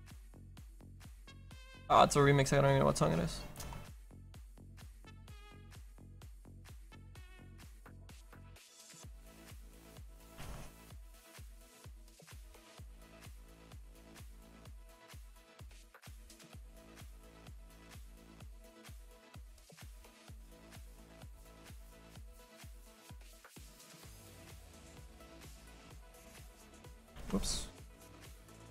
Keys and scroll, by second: 10.3 ctrl+z, 27.2 ctrl+z.